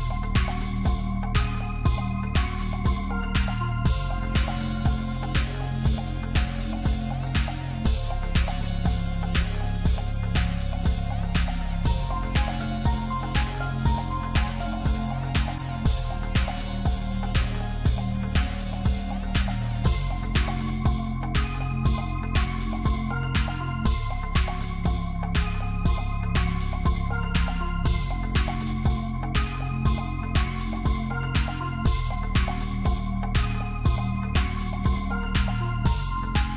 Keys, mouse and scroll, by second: 0.8 r, 3.4-5.1 drag, 5.1 scroll down 1, 5.2-5.9 middle drag, 5.9 scroll up 2, 6.1 middle click, 6.4 click, 6.8 Tab, 7.3 click, 7.8 Tab, 8.9 click, 11.4 m, 13.3 click, 15.6 m, 17.4-19.3 scroll down 1, 19.3-19.8 scroll down 1, 19.8 click, 20.5 click, 21.5 middle click, 22.4-23.3 scroll up 4, 23.3 s, 25.5-26.0 scroll up 3, 26.0-28.2 shift+middle drag, 28.2-30.5 right drag, 30.5 click, 32.8 middle click, 33.7 click, 35.8 click.